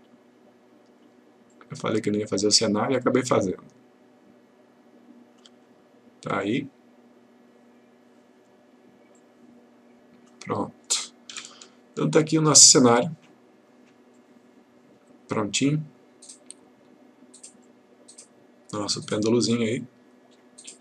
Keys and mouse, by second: 11.4 F1, 13.0-14.0 click.